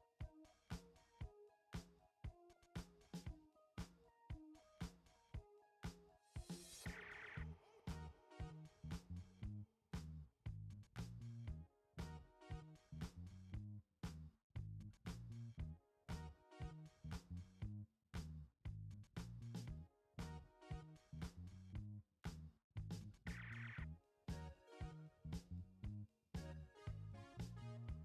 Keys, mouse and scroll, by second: 22.1 click, 25.3 click.